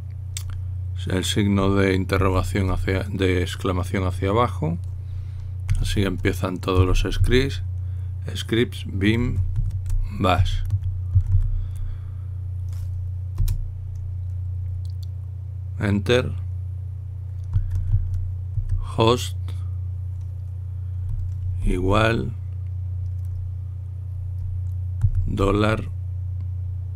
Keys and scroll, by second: 7.2-8.4 typing, 10.2-12.6 typing, 14.1 Return, 16.6 typing, 18.1-19.2 typing, 22.4 =, 25.9 shift+4.